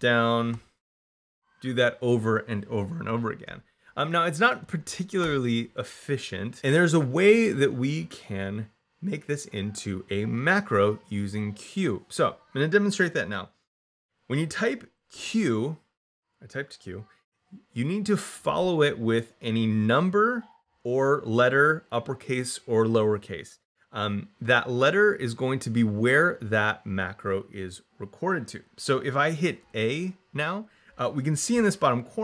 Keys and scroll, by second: 0.3 d, 0.7 e, 2.9 Escape, 4.4 u, 15.0 q, 29.5 a.